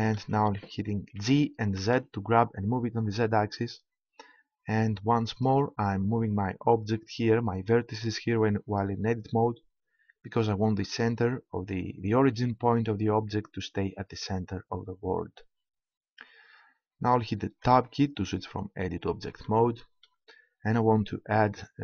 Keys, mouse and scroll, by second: 1.1 g, 5.4-7.1 drag, 17.6 Tab.